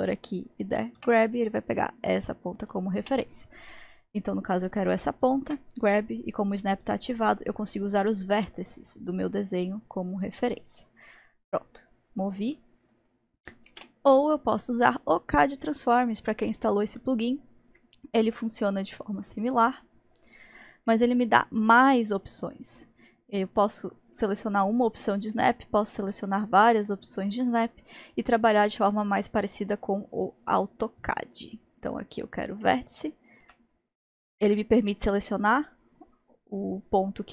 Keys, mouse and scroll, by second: 1.0 g, 5.5 g, 11.1-13.7 middle drag, 13.7 ctrl+z, 19.1 click, 20.3-24.4 drag, 24.5-24.9 drag, 25.9 shift+drag, 26.5-29.3 shift+drag, 31.8 click, 33.4 g.